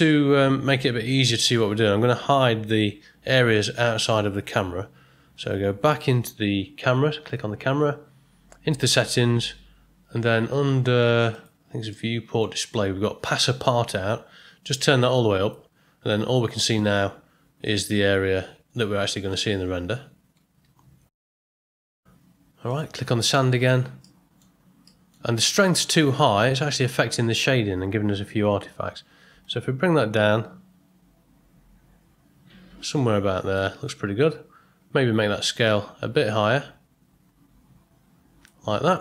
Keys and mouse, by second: 11.3 click, 11.9 middle click, 14.7 click, 24.1 middle click, 24.9 middle click, 29.4-33.5 drag, 35.6-38.4 drag.